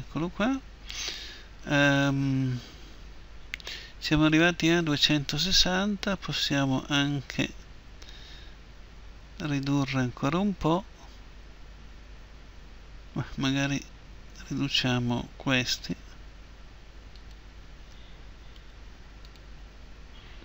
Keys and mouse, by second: 15.8-19.3 right drag, 18.6 Delete.